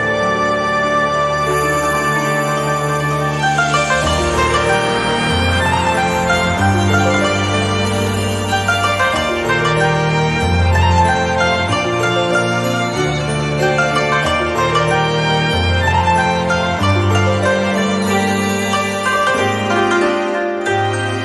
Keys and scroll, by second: 8.9 Delete.